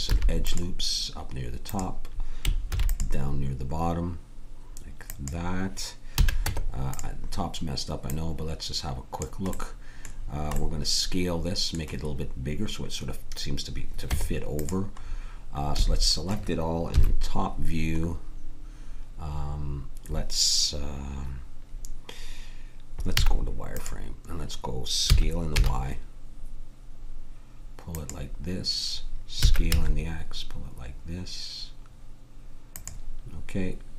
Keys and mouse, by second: 0.0 ctrl+r, 2.7 ctrl+r, 6.1 a, 6.4 Tab, 8.0-9.8 drag, 14.0 Tab, 15.7 a, 16.9 KP_7, 23.1 z, 25.1 s, 29.3 s.